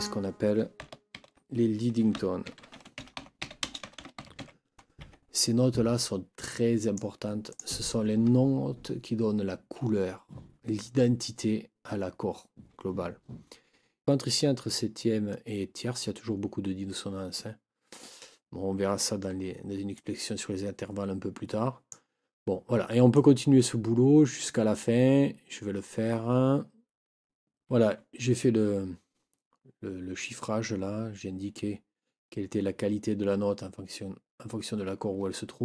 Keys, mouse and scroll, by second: 1.1 ctrl+t, 1.9-4.9 typing, 5.0 Escape, 6.0-7.2 drag, 7.5 click, 19.9-22.1 drag, 23.1-24.6 drag.